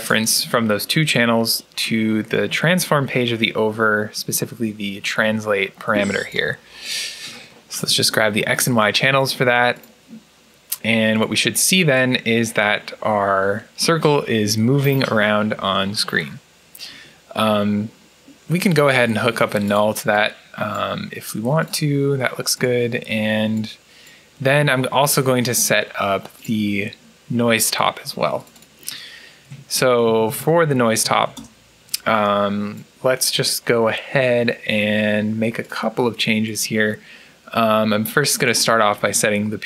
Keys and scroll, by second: 18.8 alt+n, 29.4 Tab, 29.9 shift+Tab, 31.2 Return, 31.7 typing.